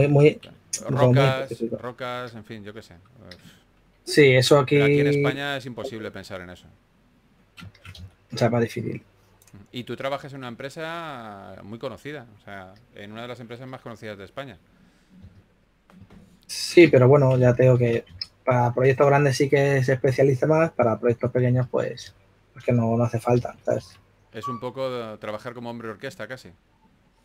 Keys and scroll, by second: 0.1 3, 2.0 4, 5.2 2, 9.0 2, 13.6 s, 15.5 shift+f, 16.8 2, 17.2 shift+f, 19.1 2, 21.1 2, 23.2 typing, 24.6-25.0 typing, 26.7 super+z.